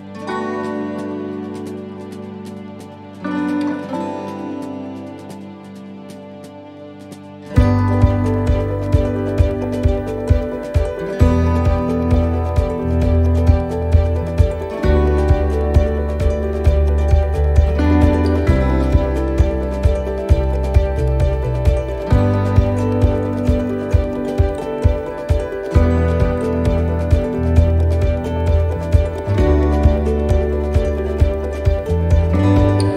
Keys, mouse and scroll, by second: 1.3 click, 3.4 middle click, 4.8 s, 8.2 click, 9.2 middle click, 9.9 shift+middle click, 10.5-11.0 scroll up 4, 12.3 s, 14.2 s, 21.2 middle click, 22.6 s, 25.1 s, 27.1 click, 29.3 click, 31.1 middle click, 32.1 shift+middle click, 32.5 scroll up 2.